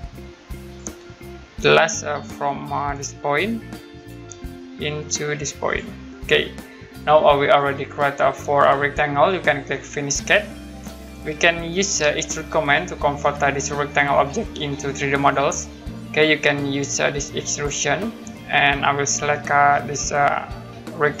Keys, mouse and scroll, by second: 0.7 click, 0.9-1.2 scroll down 1, 2.1 middle click, 2.4 scroll down 1, 3.9 click, 5.7 click, 6.0 scroll down 1, 7.7 middle click, 10.0 click, 12.2 middle click, 13.5 middle click, 15.8-16.9 scroll up 1, 17.5 click, 18.2-18.8 scroll down 1, 18.8 middle click, 21.0 click.